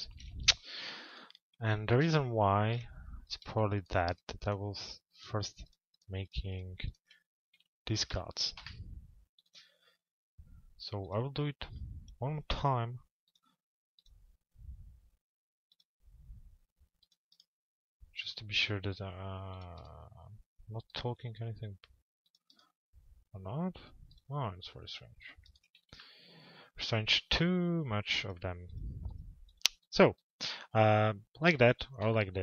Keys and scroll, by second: 8.2 Delete.